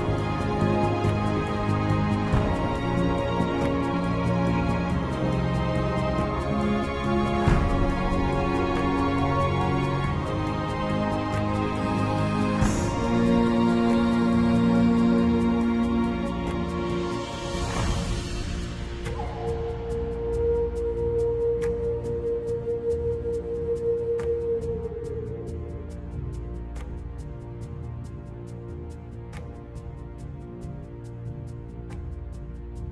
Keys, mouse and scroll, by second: 31.0 super+z, 31.4 super+z, 32.0 super+z, 32.5 super+z, 32.8 super+z.